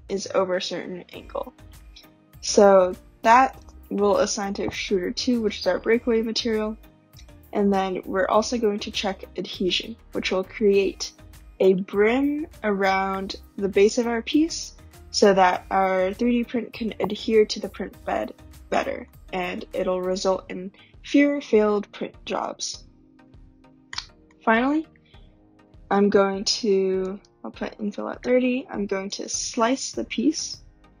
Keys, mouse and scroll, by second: 3.6 click, 4.8 click, 15.8-18.7 scroll, 18.7 scroll down 3, 18.8 scroll, 19.0 middle click, 24.2 middle click, 27.2 click, 29.1 click.